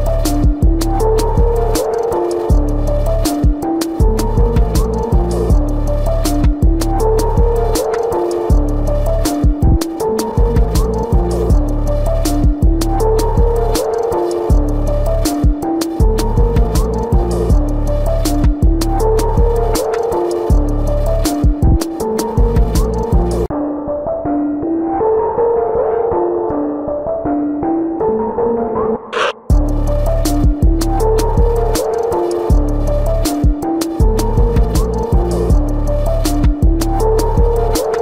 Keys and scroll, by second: 4.9 ctrl+=, 5.7 ctrl+=, 6.3 space, 9.5 ctrl+=, 10.5 ctrl+=, 14.2 ctrl+=, 22.1 space, 23.3 space, 28.0 ctrl+alt+z, 29.3 ctrl+alt+z, 36.8 ctrl+=, 37.5 ctrl+=.